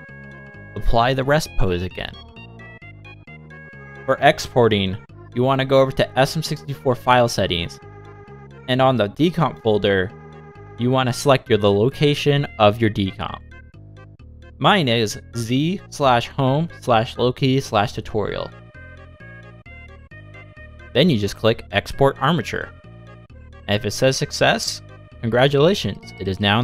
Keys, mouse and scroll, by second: 2.4 click, 2.6 middle click, 3.7 click, 6.2 click, 11.0 BackSpace, 15.4 shift+middle click, 15.4 scroll up 4, 15.5 click, 17.3-17.7 scroll up 2, 18.5 click, 19.2 click, 22.7 click, 24.1 click.